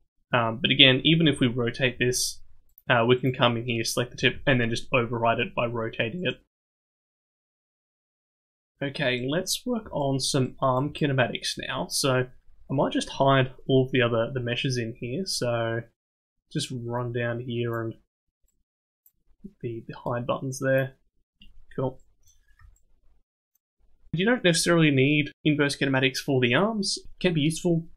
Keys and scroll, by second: 1.2 r, 4.2 r, 6.8 a, 7.4 alt+r, 7.7 alt+g.